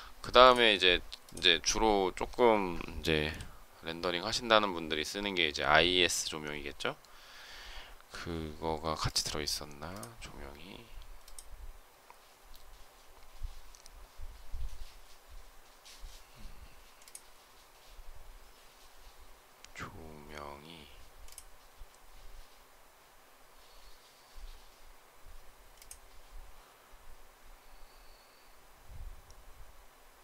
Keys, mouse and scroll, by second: 3.1 Delete.